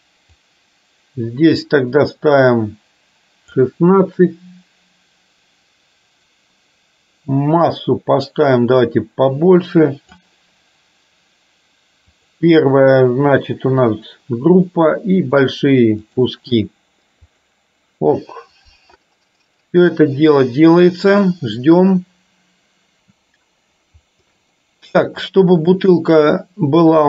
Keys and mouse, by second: 24.4 Delete, 25.3 click.